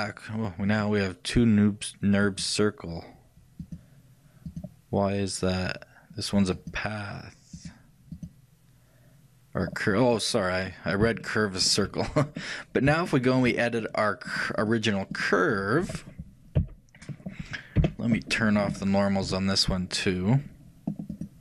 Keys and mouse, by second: 0.0-6.3 drag, 6.6-9.9 drag, 10.2-14.3 middle drag, 14.3-16.4 shift+drag, 16.6 KP_3, 17.9 KP_1, 19.3 n.